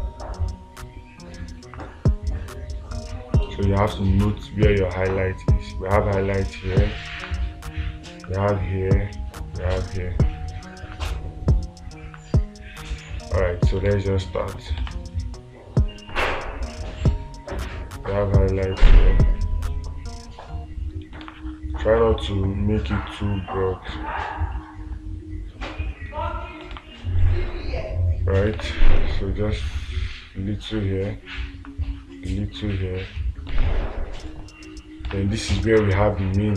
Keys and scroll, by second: 14.3 space, 21.7 space, 27.2 space, 29.0 space, 34.0 space.